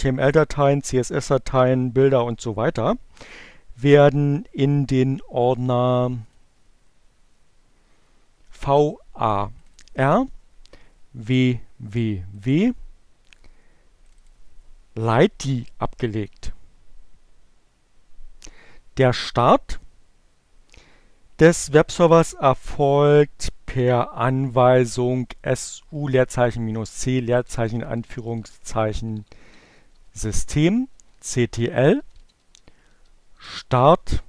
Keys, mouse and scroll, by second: 5.9 click, 8.5-9.9 drag, 11.2 click, 13.2 click, 23.5 click, 24.0 BackSpace, 26.2 BackSpace, 28.2-32.5 typing, 33.6-34.2 typing.